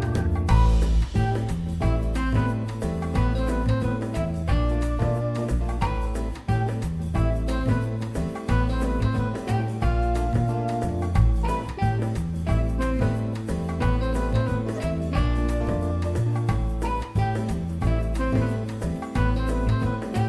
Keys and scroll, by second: 0.1 1, 3.7 1, 6.8 1, 14.2 Delete, 14.8 Delete, 16.0 e.